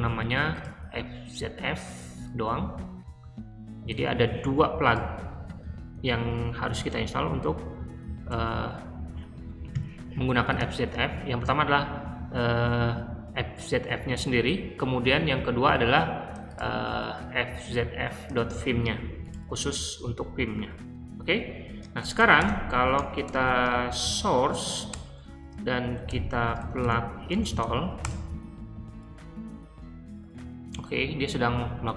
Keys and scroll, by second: 4.0 super+c, 5.9 o, 6.5 super+v, 8.2 Return, 18.3 super+c, 20.0 super+v, 21.5 Escape, 21.8-24.8 typing, 26.0-27.9 typing, 31.1 typing.